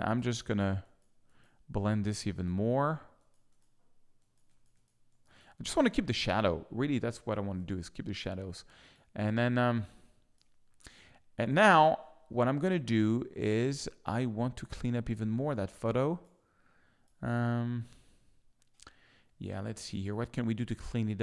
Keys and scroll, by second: 7.4 z, 9.5 alt+space, 10.2 space, 14.0 space, 17.1 space, 19.7 z.